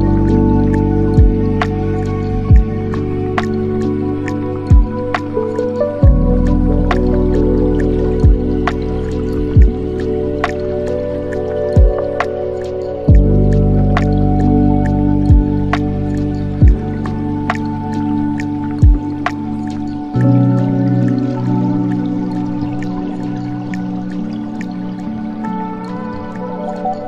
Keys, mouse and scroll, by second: 0.2 s, 5.2-13.1 middle drag, 13.1 s, 19.0 scroll down 4, 19.4-20.6 middle drag, 20.6-22.9 drag, 22.9-23.3 scroll down 6, 23.3-24.8 middle drag, 24.8 scroll up 4, 25.0-26.6 middle drag, 26.6 click.